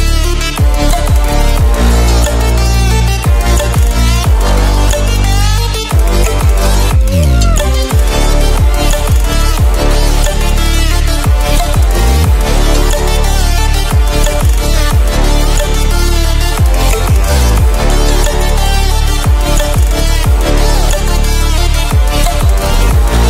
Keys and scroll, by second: 1.3 ctrl+-, 8.8 ctrl+e.